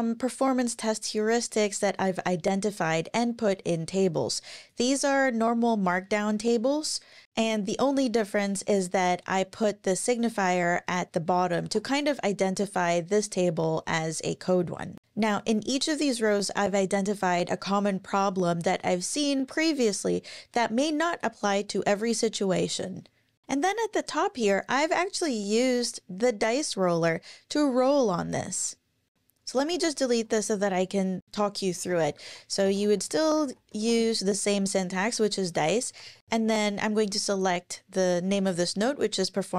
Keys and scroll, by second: 5.4 Page_Down, 10.7 super+Left, 11.6 shift+super+Right, 29.1 super+BackSpace, 29.1 super+z, 29.6 super+BackSpace, 31.7-34.3 typing, 35.5-36.5 typing, 36.8 Up, 38.3 Return.